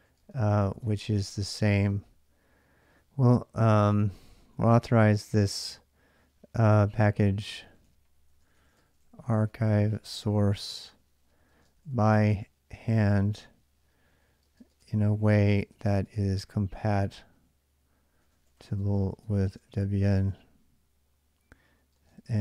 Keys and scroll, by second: 0.0-4.3 typing, 6.4-22.4 typing.